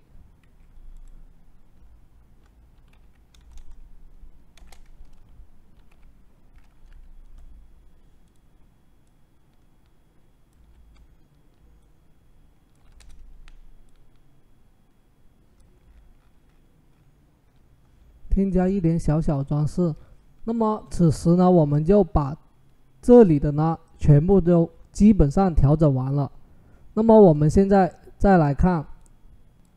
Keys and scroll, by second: 0.2 Escape, 2.3-3.3 typing, 5.5-6.6 typing, 10.4 ctrl+super+t, 12.8 Return, 15.9 typing.